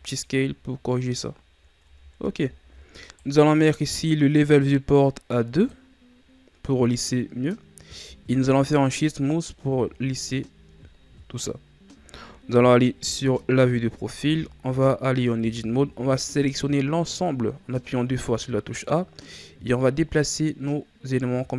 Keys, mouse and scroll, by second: 1.7 Tab, 2.4-3.0 scroll down 4, 3.0 right click, 5.5-7.8 drag, 7.8 w, 9.6 a, 9.9-11.5 scroll down 5, 11.5-11.8 scroll down 1, 11.8 KP_3, 13.6 scroll up 2, 14.1 Tab, 14.6 a, 15.3 a, 19.2-21.5 drag.